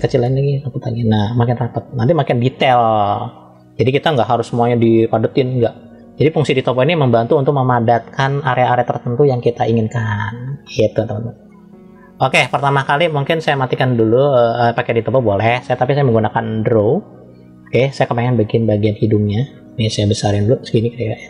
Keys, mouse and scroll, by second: 0.4 click, 11.3 click, 13.5 click, 14.6 click, 16.3 click, 18.1 scroll up 1, 20.1 f.